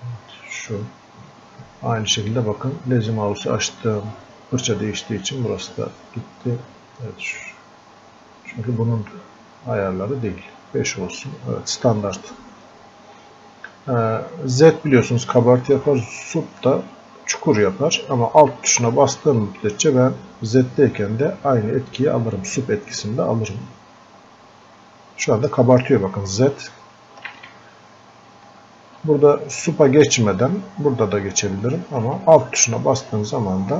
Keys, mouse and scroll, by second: 5.9-11.5 drag, 24.0-27.3 drag, 27.3 ctrl+z, 32.7-33.7 alt+drag.